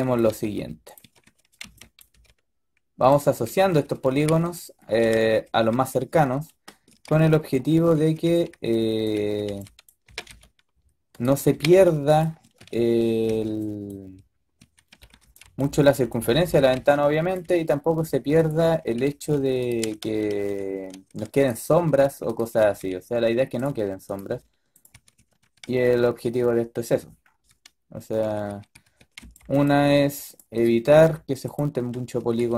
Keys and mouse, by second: 0.0-2.0 typing, 3.3 a, 3.6 a, 3.8 a, 4.0 b, 5.0 a, 5.3 a, 5.6 a, 7.0-9.9 typing, 11.4-13.2 typing, 14.5-17.3 typing, 18.5 a, 18.7 a, 18.9 a, 19.0 b, 19.7-21.7 drag, 19.9 ctrl+z, 20.2 ctrl+z, 20.5 ctrl+z, 20.9 ctrl+z, 21.7 a, 22.5 g, 24.2 g, 24.8 a, 25.1 a, 25.3 a, 28.1-29.7 typing, 30.9-32.0 drag, 30.9 g, 32.1-32.5 typing.